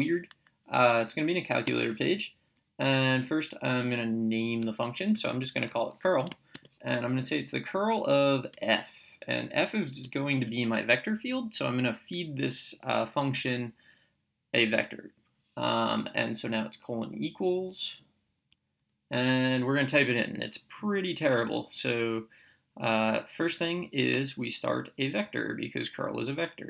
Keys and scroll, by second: 1.7 Return, 5.0-6.5 typing, 8.5 f, 10.1 Right.